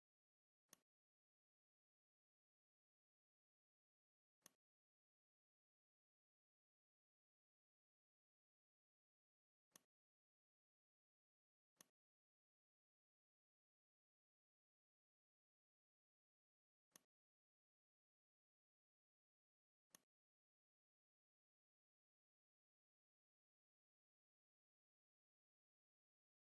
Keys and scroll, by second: 0.3 z, 1.3 n.